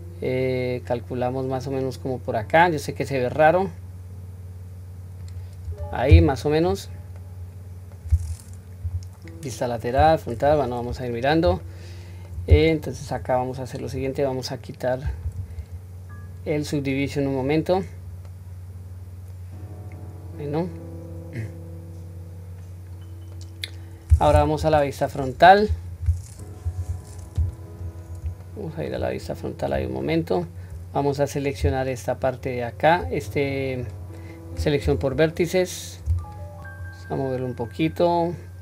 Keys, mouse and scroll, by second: 6.7-7.2 scroll down 1, 7.2-8.0 middle drag, 8.8 KP_3, 9.9 KP_1, 10.4 scroll up 1, 11.6-12.3 shift+middle drag, 11.6 scroll up 2, 13.8 click, 15.1 click, 17.0 click, 17.8-18.3 scroll down 1, 18.3-23.4 middle drag, 24.6 KP_1, 27.8-28.2 scroll down 2, 28.4-28.9 shift+middle drag, 29.2-29.7 scroll up 3, 30.0-30.6 shift+middle drag, 32.2 alt+click, 33.8 click, 34.8 2, 36.2 alt+click, 36.8 click.